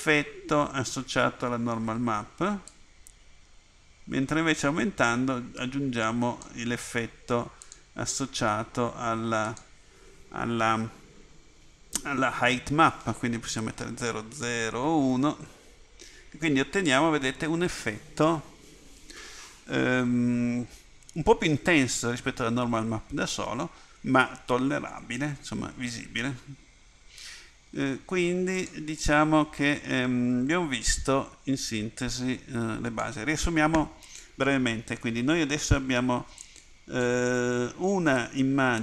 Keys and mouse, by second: 2.8 middle click, 3.5 middle click, 7.8 click, 38.2 click.